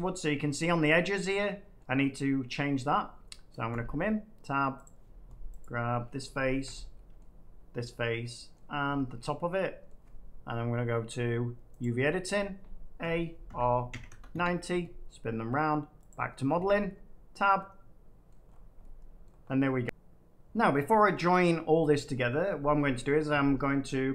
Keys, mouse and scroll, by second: 1.7 middle click, 2.5 middle click, 3.7 Tab, 4.8 click, 5.5 click, 7.1 middle click, 7.9 middle click, 8.5-9.5 middle drag, 9.8 middle click, 11.7 click, 12.9 a, 13.4 r, 13.8 9, 14.0 0, 14.3 Return, 15.1 typing, 16.0 click, 16.5 Tab, 18.2 middle click, 18.4-18.7 scroll, 19.2 middle click, 19.4 scroll, 21.1 middle click, 21.6 middle click.